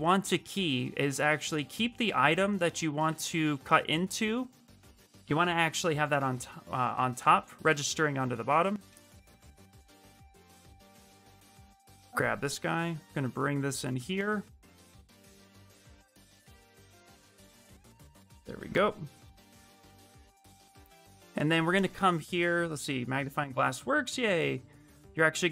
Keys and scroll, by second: 8.6 w, 13.7 q, 14.8 w, 19.8 q, 21.7 shift+z, 22.2 shift+m.